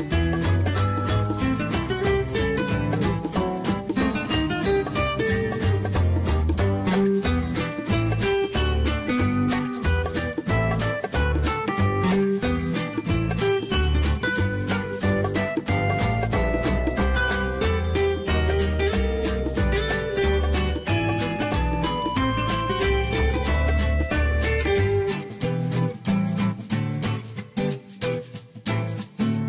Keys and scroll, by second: 15.5 Escape, 25.3 Escape.